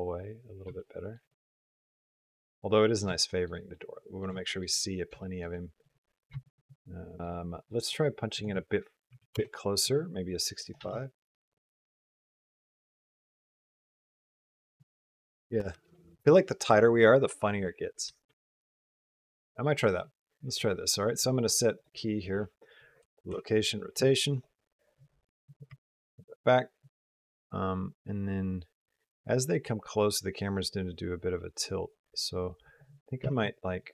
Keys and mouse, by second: 1.1-2.2 middle drag, 2.3 middle click, 3.0 shift+middle click, 3.6-4.1 middle drag, 4.2 shift+middle click, 4.6 middle click, 5.3 shift+middle click, 5.7 middle click, 7.2 space, 8.2 click, 10.5 click, 10.6 space, 16.0 space, 18.4 r, 22.9 i, 23.1 i, 24.1 click, 25.3 click, 25.5 g, 26.7-32.6 drag, 33.0 r.